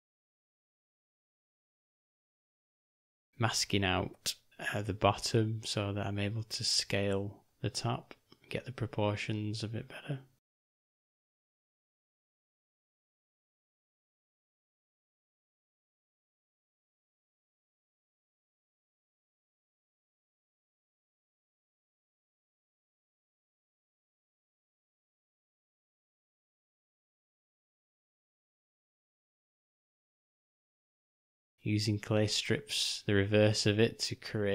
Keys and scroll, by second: 1.0 s, 5.6 g, 16.5 v, 20.6 u, 22.0 [, 22.1 [, 27.6 j.